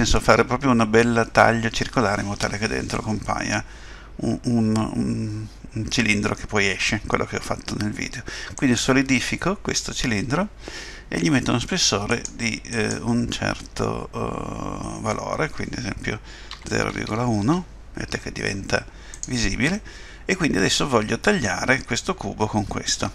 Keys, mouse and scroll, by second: 12.1 click, 12.7 click, 19.7 middle click.